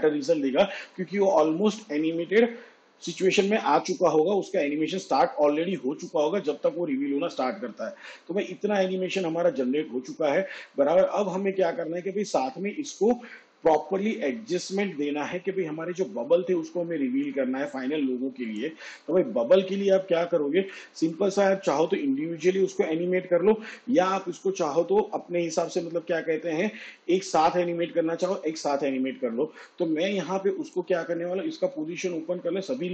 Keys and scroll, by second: 32.2 p.